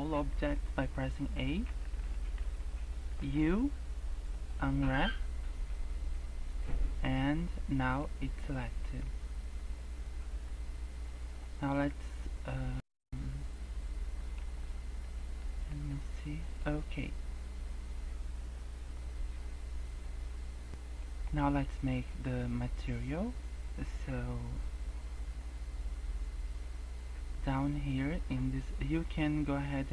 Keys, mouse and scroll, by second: 1.1-3.2 typing, 5.1 scroll down 4, 5.4-5.7 scroll up 3, 6.3 scroll up 3, 6.8 scroll down 1, 7.0 scroll up 2, 7.6 scroll down 2, 7.8 scroll up 2, 8.6 scroll down 2, 8.8 scroll up 2, 13.0 middle click, 14.5-15.0 scroll down 5, 15.0 middle click, 15.5 scroll up 3, 15.9 middle click, 16.4 middle click, 20.7 scroll down 3, 20.9 middle click, 21.3 scroll up 1, 21.7-22.0 scroll down 2, 22.1 scroll up 1, 22.4 scroll down 1, 22.7 scroll up 1.